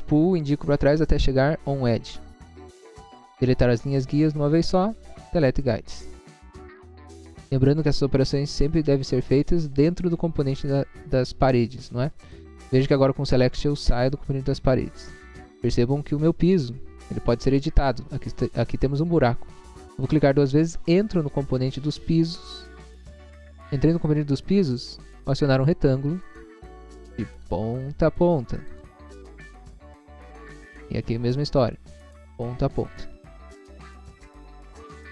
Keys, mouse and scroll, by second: 0.7 scroll up 1, 1.9 click, 2.6 scroll down 1, 5.3 click, 6.8 scroll down 1, 7.3 scroll down 1, 7.6 middle click, 8.4 middle click, 12.2 click, 13.9 click, 15.0 middle click, 15.9 scroll up 1, 16.4 middle click, 17.0 middle click, 19.9 click, 20.1 double click, 22.2 scroll up 1, 25.6 click, 26.2 scroll up 1, 27.6 click, 28.7 click, 29.2 scroll down 1, 30.2 middle click, 30.6 middle click, 30.8 scroll up 1, 31.3 scroll up 1, 32.3 click, 33.4 click, 33.9 scroll down 1.